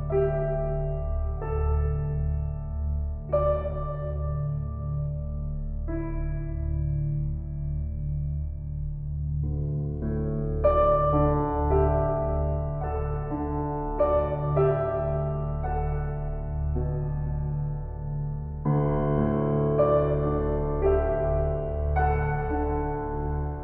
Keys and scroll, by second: 0.0 shift+s, 3.1 s, 5.7 shift+s.